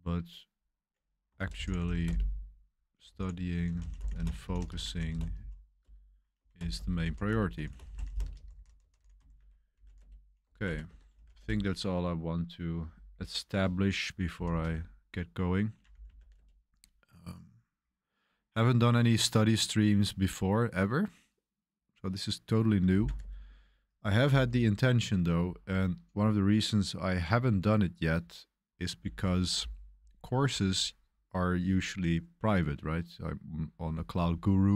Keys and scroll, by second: 1.0-12.5 typing, 14.1-16.7 typing, 22.9 typing, 29.0 super+1, 29.2 super+1.